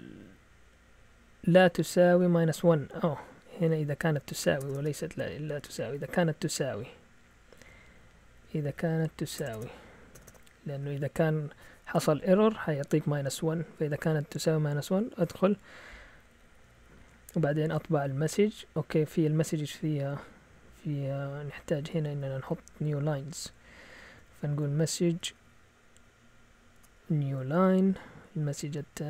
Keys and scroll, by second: 0.2 Left, 0.8-7.5 typing, 1.6 Right, 2.7 Left, 3.9 Left, 9.4-10.7 typing, 16.1 Down, 16.3-16.9 typing, 18.9-19.7 typing, 21.1-24.5 typing, 26.5-28.9 typing.